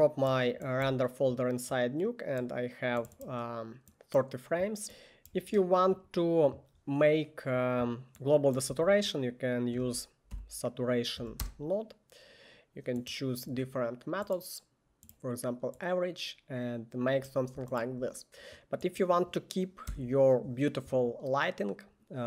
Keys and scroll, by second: 1.0 1, 8.8 Tab, 9.6-10.9 typing, 11.3 Down, 11.5 Return, 20.0 Delete.